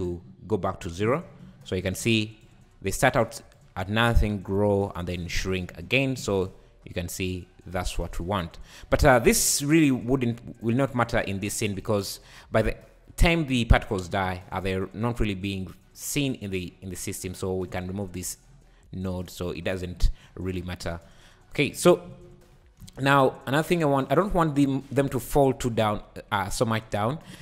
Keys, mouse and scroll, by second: 2.4-5.9 drag, 5.9 shift+right click, 6.3 space, 9.0 space, 16.6-18.2 scroll down 1, 18.2-20.3 drag, 20.3-22.8 typing, 20.6 click, 23.9 click.